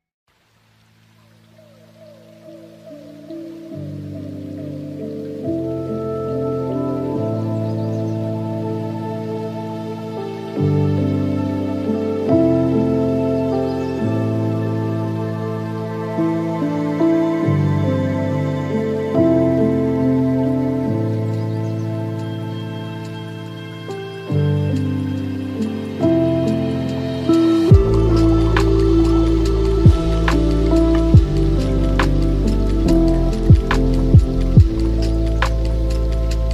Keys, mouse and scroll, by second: 0.9 shift+a, 4.0-4.3 scroll down 2, 4.3-6.2 middle drag, 6.2-7.2 drag, 7.2-9.1 middle drag, 9.1-11.8 drag, 11.8 shift+d, 15.6-17.4 drag, 17.4 shift+a, 20.4-20.9 scroll down 4, 20.9-22.5 middle drag, 22.5 s, 25.5 s, 27.0-28.1 middle drag, 28.1 s, 31.2 ctrl+middle click, 32.1 s, 34.8-36.4 middle drag, 36.4 Tab.